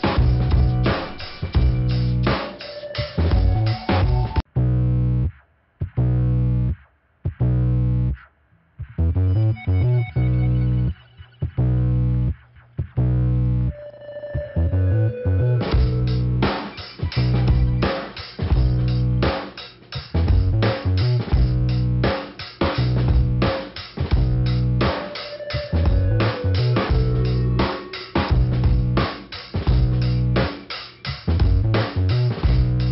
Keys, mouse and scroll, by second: 0.4 click, 1.4 click, 2.2 click, 3.7 click, 4.8 click, 4.9 click, 5.6 click, 6.2 click, 6.9 click, 7.4 right click, 7.5 right click, 8.4 click, 9.4 click, 10.4 click, 11.9 click, 12.6 click, 13.5-13.8 scroll down 1, 15.6 click, 16.2 middle click, 17.0 click, 18.4 click, 19.0 click, 20.9 click, 21.6 click, 23.2 click, 26.4 click, 27.1 click, 28.0 middle click, 28.7 scroll up 1, 32.5 click.